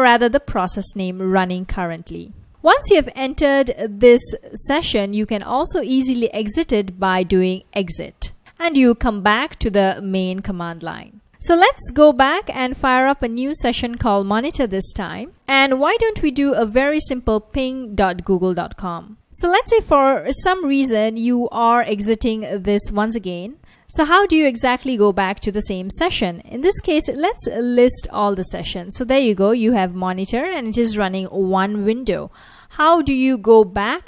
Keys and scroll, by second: 6.1-7.5 typing, 7.7 Return, 11.3 Up, 14.8 Return, 15.7-18.9 typing, 23.1 super+w, 23.4-24.2 typing, 26.5-28.0 typing, 29.8 F1, 30.1 F1.